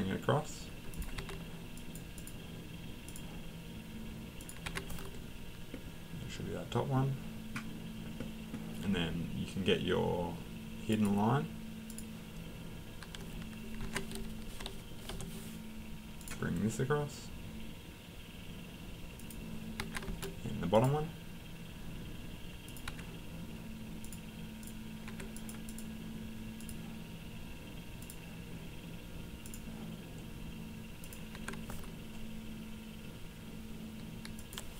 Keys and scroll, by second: 1.2 Escape, 3.7 Escape, 4.6 Escape, 13.8 Escape, 19.8 Escape, 22.9 Escape, 31.3 Escape.